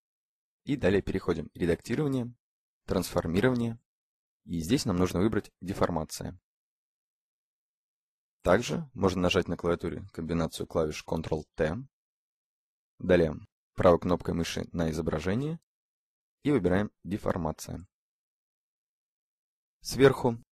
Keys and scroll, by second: 10.1 ctrl+t.